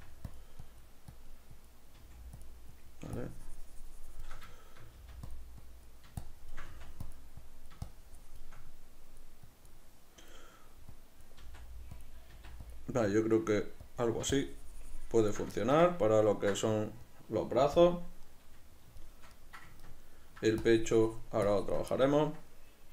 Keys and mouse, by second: 0.8-2.5 drag, 2.1 f, 2.9-4.7 drag, 4.7 shift+middle click, 5.1 f, 5.7-7.3 drag, 6.8 f, 7.5-12.1 drag, 11.5 f, 12.4 f, 13.2-15.7 drag, 15.7-20.7 ctrl+shift+middle drag, 17.9 KP_Decimal, 20.7-22.2 shift+drag, 22.2-22.9 ctrl+middle drag.